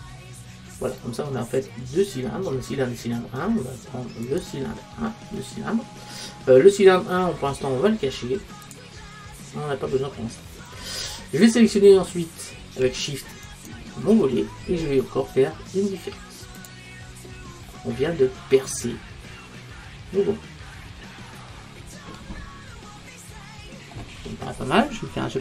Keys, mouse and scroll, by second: 4.3 click, 10.3-12.8 middle drag, 13.5-16.6 right drag, 16.6 click, 17.7-19.6 middle drag, 24.3-25.4 middle drag.